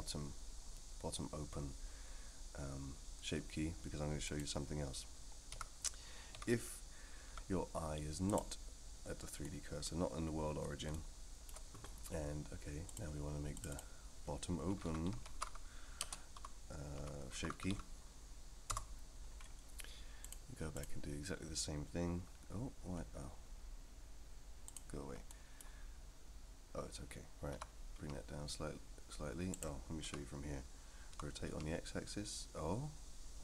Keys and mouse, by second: 4.2 click, 5.5 a, 6.3 g, 9.4 middle click, 10.9-11.5 shift+middle drag, 12.9 drag, 13.5 click, 13.7-19.2 drag, 15.2 t, 20.2-20.8 drag, 24.6 click, 25.3 middle click, 27.5 r, 30.0 KP_3, 31.1 r.